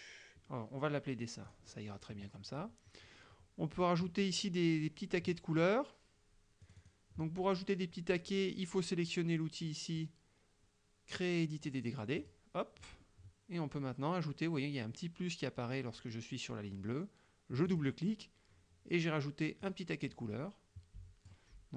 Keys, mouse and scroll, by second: 1.5 click, 6.7 click, 12.3 click, 17.6 click, 19.7-21.5 drag.